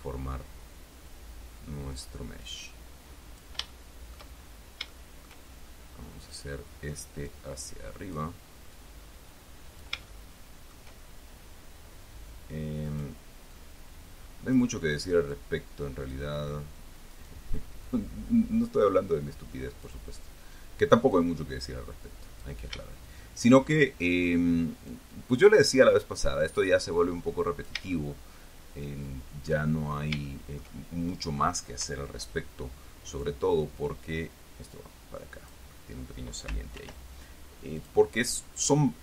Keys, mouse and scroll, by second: 2.7-3.9 drag, 4.0 shift+middle click, 5.0 scroll up 2, 5.2 shift+middle click, 6.6 right click, 7.6-8.6 drag, 9.0-10.3 drag, 10.4 shift+middle click, 13.2 right click, 13.9-15.1 drag, 15.7 click, 17.5 right click, 18.2-20.4 drag, 21.5-22.9 drag, 24.5 right click, 25.2-26.5 drag, 26.8-28.2 drag, 28.2-30.0 shift+middle drag, 30.2-30.6 shift+scroll up 3, 30.6 shift+middle click, 33.4 right click, 34.2-36.0 drag, 37.1 ctrl+r, 38.1 click.